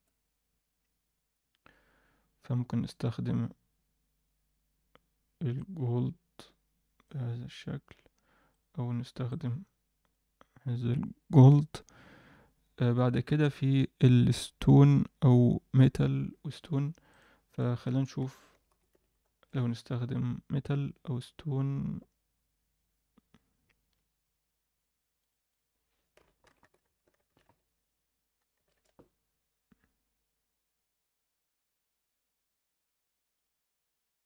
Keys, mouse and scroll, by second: 8.5 click, 13.4 click, 17.1 click, 17.4-19.4 drag, 25.1 click, 25.4-28.7 drag.